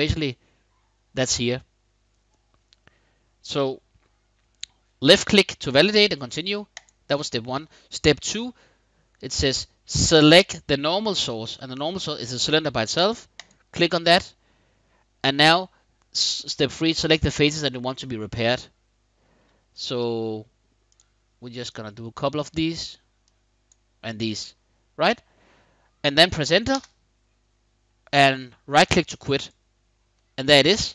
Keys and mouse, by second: 6.5 middle click, 13.0 click, 19.5 click, 20.6 shift+click, 21.4 shift+click, 23.0 shift+click, 26.4 Return, 29.1 click, 29.8-30.9 middle drag.